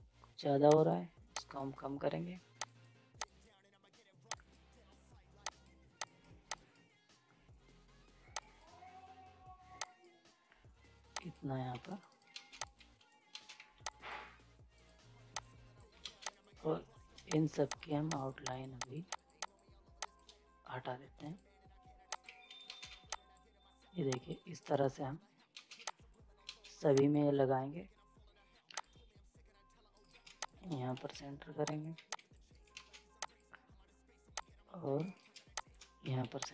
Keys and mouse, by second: 0.7 click, 11.7 z, 11.9 right click, 12.3 ctrl+space, 12.6 click, 12.7 z, 12.9 right click, 13.3 ctrl+space, 13.5 z, 13.9 click, 14.7 right click, 15.3 click, 15.4 click, 16.0 ctrl+space, 16.3 click, 21.2 right click, 22.1 click, 22.2 z, 22.5 right click, 22.7 space, 22.9 z, 23.1 click, 24.6 right click, 24.6 right click, 25.6 space, 25.8 z, 25.9 click, 26.5 ctrl+space, 26.9 click, 29.9 ctrl+right click, 30.4 shift+click, 30.9 c, 31.7 click, 31.9 z, 32.1 click, 32.5 right click, 32.7 ctrl+space, 33.2 click, 35.0 ctrl+right click, 35.6 click, 36.0 c, 36.4 click.